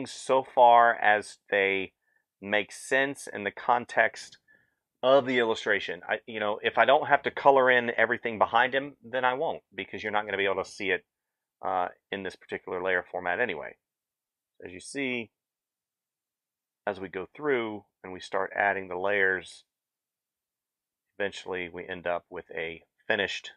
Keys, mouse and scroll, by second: 23.4 f.